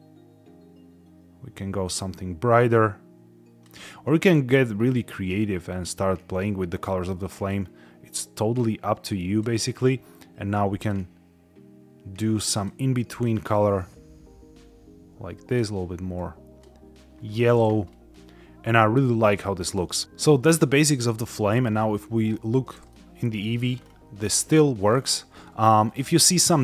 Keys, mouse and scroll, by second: 10.7 click, 12.4 click, 17.8-18.1 scroll up 2, 18.5 scroll down 1, 19.7 middle click, 20.0 scroll down 5, 21.2 z, 22.8-23.3 middle drag, 23.6 scroll down 3, 24.1-24.4 middle drag, 24.8 scroll up 2, 25.2-25.7 shift+middle drag, 26.3 middle click.